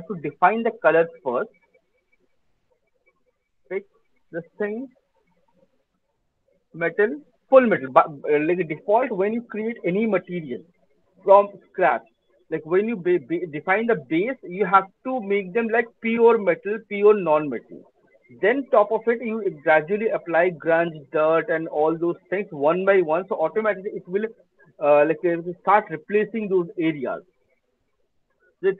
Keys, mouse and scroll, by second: 0.5 right click, 3.0 click, 3.0 scroll, 4.7 scroll, 5.9-6.3 scroll, 7.7 right click, 8.1 click.